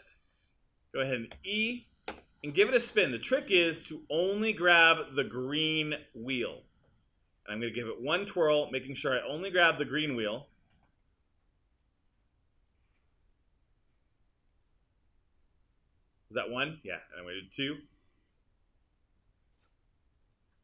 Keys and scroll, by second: 1.4 e.